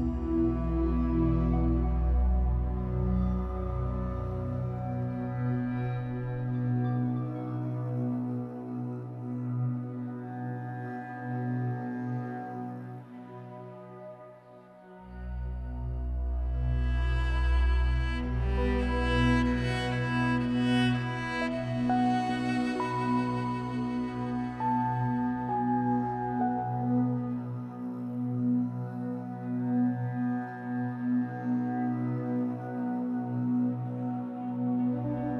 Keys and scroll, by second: 1.4 Escape, 1.8 2, 4.7 2, 5.5 alt+c, 9.5 Escape, 10.7 alt+c, 18.0 2, 19.0 w, 19.8 Escape, 20.1 2, 24.9 Delete, 26.2 2, 28.4 Delete, 29.1 3.